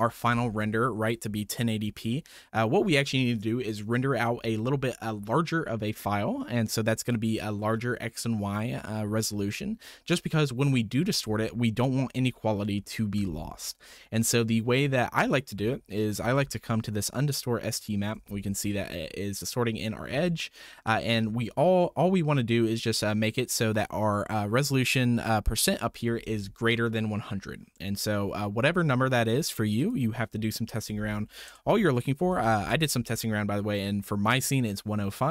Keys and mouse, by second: 17.6 ctrl+shift+click, 20.3-21.0 shift+drag, 29.7-32.6 drag.